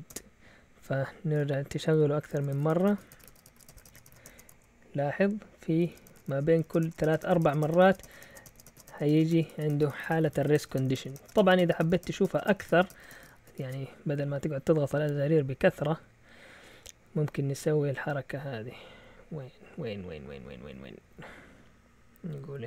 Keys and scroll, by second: 0.1 Return, 1.3 Up, 1.6 Return, 2.2-4.5 typing, 5.7-7.3 typing, 5.8 Return, 6.5 Up, 6.6 Return, 6.7 Up, 6.8 Return, 7.2 Return, 7.4 Return, 7.6 Return, 7.9 Up, 8.0 Return, 8.1 Up, 8.2 Return, 8.3 Up, 8.4 Return, 8.5 Up, 8.6 Return, 8.7 Up, 8.8 Return, 8.9 Up, 9.1 Return, 9.4 Up, 9.5 Return, 9.6 Up, 9.7 Return, 9.8 Up, 9.9 Return, 10.0 Up, 10.1 Return, 10.2 Up, 10.3 Return, 10.5-22.6 typing, 10.7 Up, 10.8 Return, 10.9 Up, 11.1 Return, 11.3 Up, 11.4 Return.